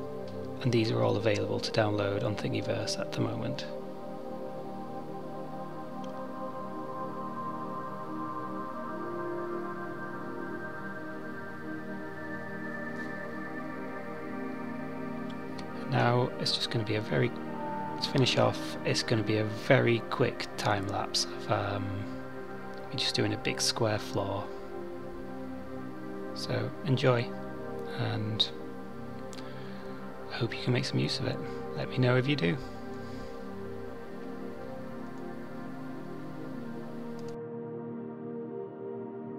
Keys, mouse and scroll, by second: 12.5 click, 13.0 click, 13.6 s, 17.4 click, 20.3 ctrl+a, 21.3 KP_Decimal, 21.8 middle click, 22.5 Tab, 22.8 right click, 24.3 click, 24.7 click, 26.6 click, 27.4 right click, 29.0 click, 29.3 click, 30.1 click, 30.7 click, 33.0 Tab, 33.6 middle click, 34.1 middle click, 34.8 Tab, 35.4 ctrl+KP_Subtract, 36.2 2, 37.1 3, 38.6 alt+click, 39.1 alt+click.